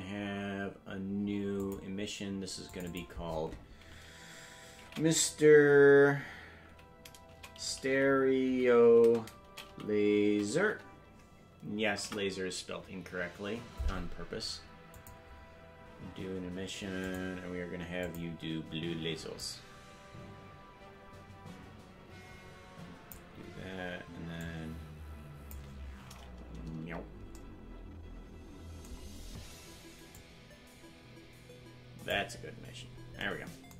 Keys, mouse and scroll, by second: 1.6 click, 2.7 click, 2.9-13.9 drag, 14.9-17.2 drag, 18.0 click, 24.4-25.5 drag, 26.8 KP_Decimal, 30.1-32.1 drag, 32.6-33.1 scroll down 7.